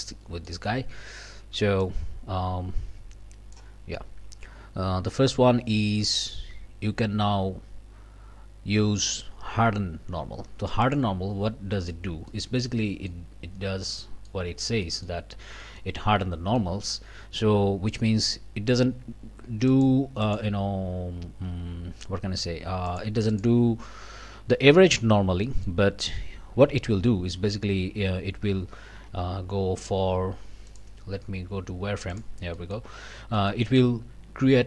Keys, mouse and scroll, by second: 0.1 click, 1.8-3.7 drag, 10.8 click, 11.5 scroll down 1, 11.7 click, 12.3 click, 13.6 scroll down 1, 13.9 middle click, 14.4 scroll up 1, 14.8 middle click, 15.2 scroll up 1, 15.6 middle click, 16.6 middle click, 19.7 click, 20.2 click, 22.9 click, 23.3 click, 24.2 scroll down 1, 24.5 click, 25.1 scroll up 1, 25.4 click, 28.5 Tab, 30.7 click, 32.1 click, 32.6 click, 32.9 scroll up 1, 33.4 click.